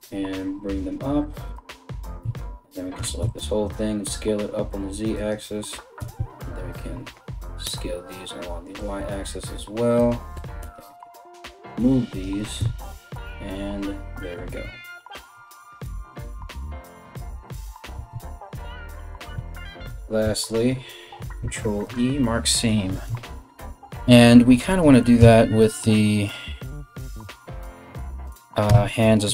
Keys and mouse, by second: 1.8 a, 2.6 s, 10.0 g, 12.2 z, 17.6 a, 17.7 a, 20.0 alt+right click, 21.0 ctrl+e, 22.7 Tab, 24.4 KP_1, 24.8 Tab, 28.3 Tab, 29.1 Tab.